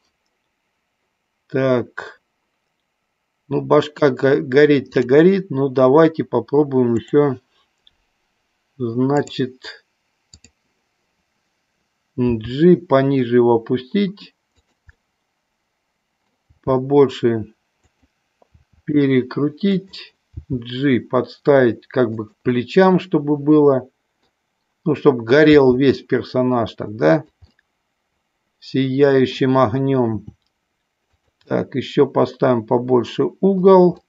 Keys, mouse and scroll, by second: 4.9 drag, 6.9 click, 10.4 click, 12.3 g, 14.7 click, 15.1-16.3 middle drag, 16.6 g, 17.9 click, 18.6 r, 20.3 g, 22.3 click, 22.6 scroll up 1, 22.7-24.4 middle drag, 24.4 scroll down 1, 25.6 g, 27.2 click, 27.7-29.6 middle drag, 30.2 r, 31.2 click, 31.5-33.7 middle drag.